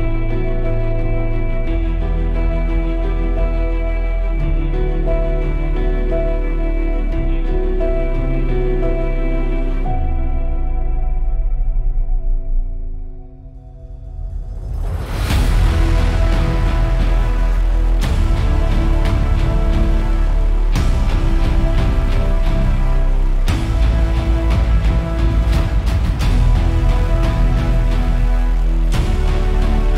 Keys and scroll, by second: 5.3 super+], 7.6 super+e, 9.5 super+e, 16.5 super+e, 17.7 super+[, 26.4 super+=.